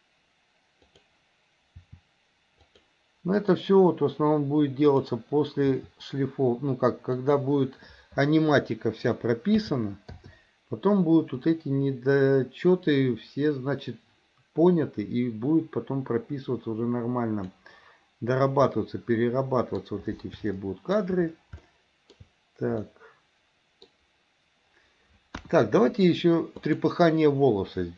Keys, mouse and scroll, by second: 1.0 click, 2.0 r, 3.6 click, 5.0 click, 5.9 r, 9.8 a, 10.5 i, 11.6-17.8 drag, 18.8-20.0 middle drag, 20.8-21.2 shift+middle drag, 21.8 shift+middle click, 23.0-24.0 middle drag, 25.6 KP_1, 26.8-27.2 drag.